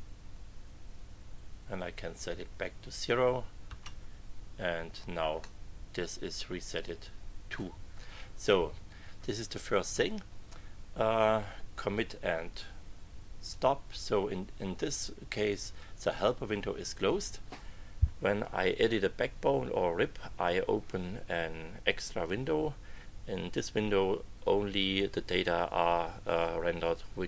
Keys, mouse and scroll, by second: 3.6 Return, 5.4 middle click, 5.9 click, 6.5 middle click, 7.1 click, 7.4 middle click, 13.5 click.